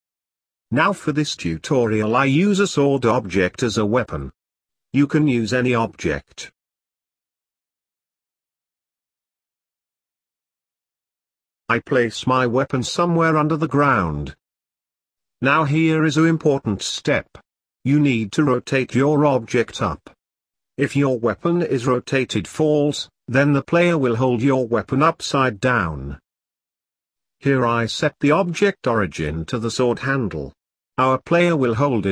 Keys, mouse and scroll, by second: 2.8-5.6 drag, 8.0 click, 9.6-10.6 scroll down 1, 10.8-13.0 drag, 13.0 g, 14.1 KP_Decimal, 14.6 scroll down 4, 14.8-15.4 middle drag, 15.4 scroll up 3, 15.6 middle click, 16.2 s, 18.0-18.4 scroll down 1, 18.4 r, 20.4-20.9 middle drag, 20.9-21.3 scroll down 1, 21.3 middle click, 21.8-22.2 scroll up 3, 22.2-23.8 middle drag, 23.8 r, 25.2 Tab, 25.8 click, 26.0 scroll up 1, 26.1 middle click, 27.1 z, 27.4 middle click, 27.7 c, 30.8 Tab, 31.4 Tab.